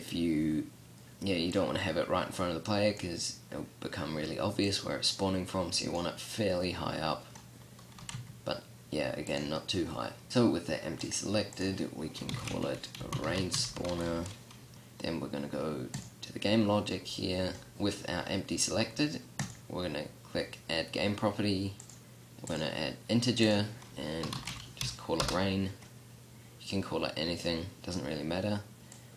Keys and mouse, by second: 1.7-5.9 middle drag, 8.2 g, 14.7 click.